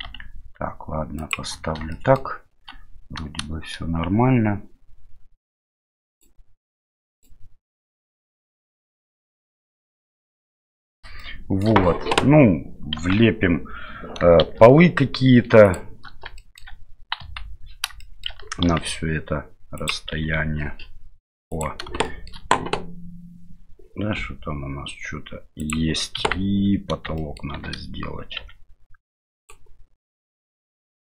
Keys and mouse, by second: 0.0 g, 2.0 shift+middle click, 6.1 click, 7.1 click, 11.2-11.6 shift+middle drag, 13.0 KP_1, 14.4 shift+a, 16.4 shift+middle click, 17.2 KP_7, 18.0 middle click, 18.6 g, 20.1 s, 22.1 middle click, 24.2 s, 26.2 KP_1, 27.3 shift+middle click, 27.5 shift+d, 30.7 click.